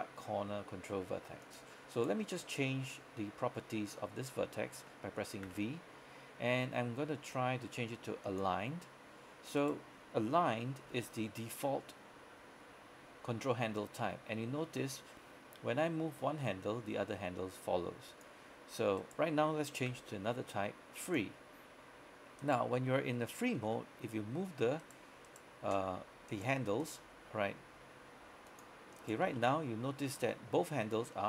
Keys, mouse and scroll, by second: 1.5 click, 2.0 right click, 5.5 v, 8.3 click, 9.7 right click, 10.9 g, 18.2 click, 19.1 right click, 20.0 v, 21.1 click, 22.5 right click, 23.6 g, 24.9 right click, 25.8 g, 26.4 right click, 27.1-27.7 typing, 28.6 click, 29.1 right click, 29.3 typing.